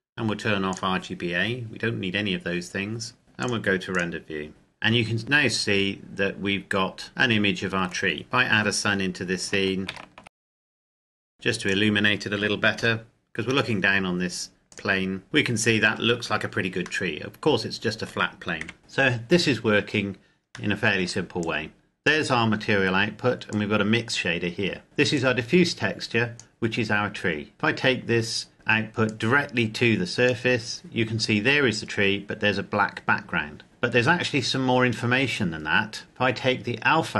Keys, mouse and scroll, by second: 0.4 click, 3.2 click, 4.7-5.5 scroll up 1, 5.5 scroll down 1, 7.1 middle click, 8.2-9.1 scroll up 1, 9.5 shift+a, 10.4 click, 10.8 scroll down 1, 11.0 g, 11.1 click, 11.4 right click, 12.2 KP_Decimal, 12.5 KP_7, 14.4 click, 15.2-15.9 scroll up 1, 16.7 middle click, 18.4 KP_7, 19.6-20.4 scroll up 1, 20.4 middle click, 21.2 click, 28.8 click, 31.6-33.5 scroll down 1, 35.0 click.